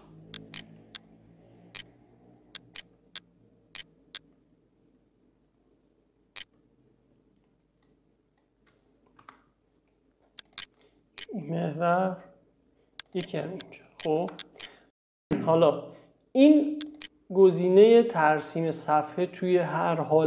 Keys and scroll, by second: 0.0 l, 9.3 Escape, 14.2 Escape.